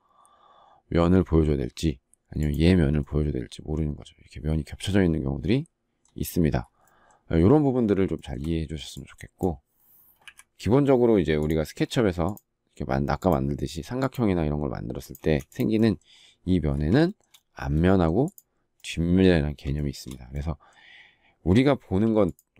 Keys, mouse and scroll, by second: 8.1 shift+middle click, 10.1 Delete, 15.1 space, 17.0 shift+middle click, 19.7 shift+middle click.